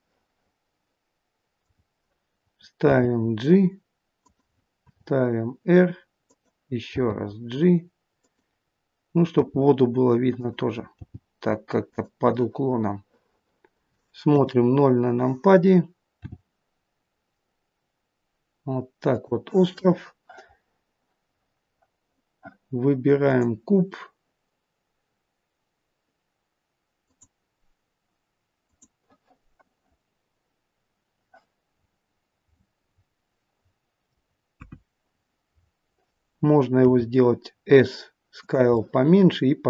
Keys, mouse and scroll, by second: 2.8 g, 4.8 r, 6.8 g, 9.3 r, 10.9 g, 12.3 middle click, 14.3 KP_0, 16.2 g, 23.1 click, 26.9 click, 28.6 click, 31.8-32.7 scroll down 11, 34.6-35.5 scroll down 9, 34.6 KP_1, 35.5-36.5 scroll up 4, 36.9 s, 38.8 middle click.